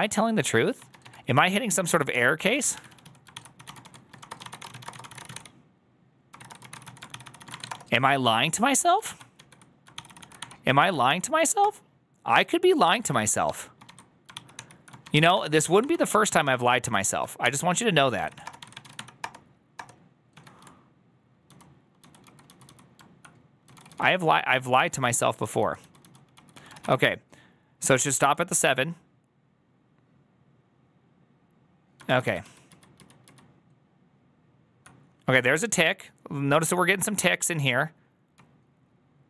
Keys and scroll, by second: 0.0-7.9 typing, 3.2 ctrl+c, 8.9 ctrl+a, 9.2 2, 9.8 ctrl+c, 10.2 Up, 10.9 Up, 11.5 Return, 13.0 ctrl+a, 13.1-16.5 typing, 14.4 ctrl+h, 15.7 Up, 16.7 Return, 17.3 ctrl+h, 17.8-20.2 typing, 21.3-27.3 typing, 28.7 ctrl+a, 32.3 ctrl+a, 32.3 ctrl+u, 32.3 [, 32.5 ctrl+u, 32.8 ctrl+u, 33.1 ctrl+u, 38.6-39.2 k.